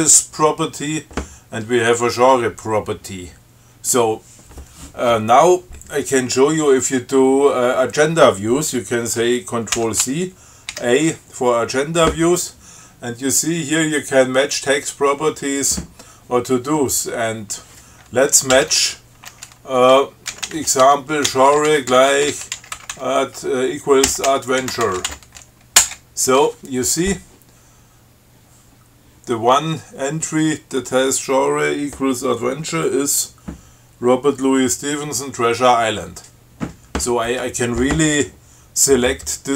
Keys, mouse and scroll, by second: 10.0 ctrl+c, 10.9 a, 18.8 shift+m, 20.3-25.8 typing, 26.1 Return.